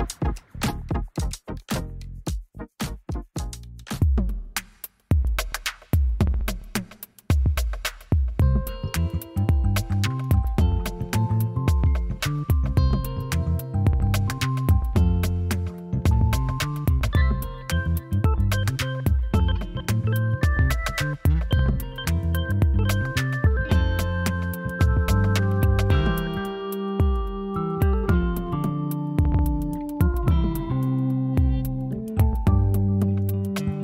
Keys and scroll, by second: 2.8 ctrl+d.